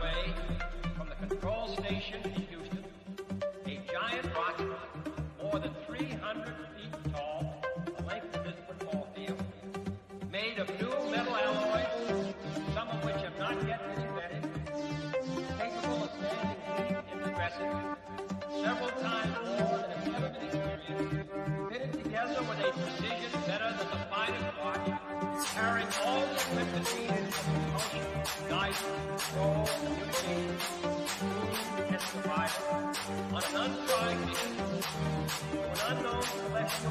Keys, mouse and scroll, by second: 2.0 click, 2.0 typing, 6.0-7.7 shift+middle drag, 7.7 click, 8.4-13.0 middle drag, 13.6-14.2 scroll down 1, 14.2-17.1 middle drag, 17.1-22.2 drag, 22.5 scroll up 1, 26.1 click, 27.8 scroll down 1, 29.7 scroll up 1, 30.2 click, 30.8 scroll down 1, 36.7-36.9 scroll up 1.